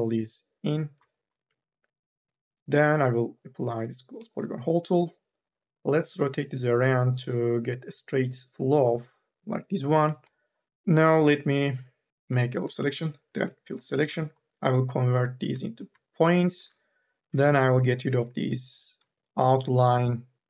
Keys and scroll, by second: 1.3 e, 13.1 u, 13.6 f, 17.0 y, 17.4 k, 18.4 u, 18.7 l.